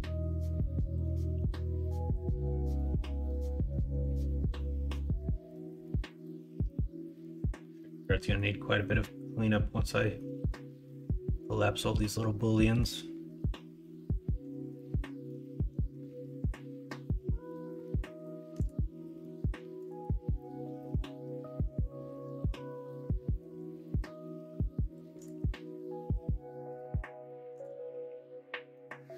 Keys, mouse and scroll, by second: 0.0 middle click, 1.0 Tab, 1.8 Tab, 2.5-3.0 middle drag, 3.4 middle drag, 4.4 middle drag, 5.0 shift+middle drag, 5.8-6.6 middle drag, 7.1 middle drag, 8.1 middle drag, 8.6 middle drag, 10.0 middle click, 12.3 middle click.